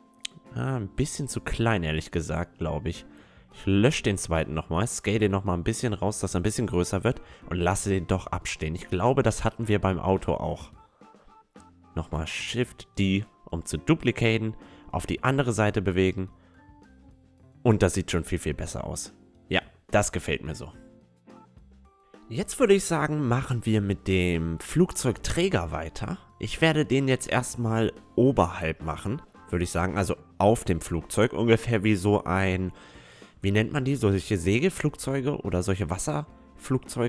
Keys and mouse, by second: 0.1 Tab, 0.1-2.8 middle drag, 0.4 Tab, 0.7 a, 1.3 a, 3.5-4.5 drag, 4.3 x, 4.5-6.8 right drag, 5.6 s, 7.3-11.7 drag, 10.9 KP_1, 11.7-14.1 middle drag, 12.2 shift+d, 13.0-14.9 drag, 13.0-14.1 right drag, 16.0-21.3 middle drag, 16.6 a, 22.3-31.7 middle drag, 26.0 right click, 26.8 Tab, 26.8 click, 28.3 Tab, 28.6 a, 32.8 Tab, 33.0 middle click, 34.0-35.9 drag, 34.6-36.8 right drag, 35.7 a, 36.5 middle click, 36.8-37.0 drag, 36.8-37.0 middle drag.